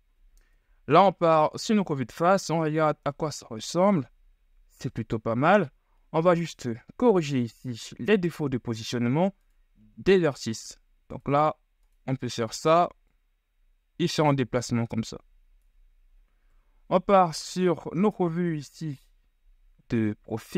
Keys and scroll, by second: 0.8 KP_1, 1.2 z, 3.0 shift+Tab, 7.4 Tab, 16.7 KP_3, 17.3 z, 17.9 shift+z.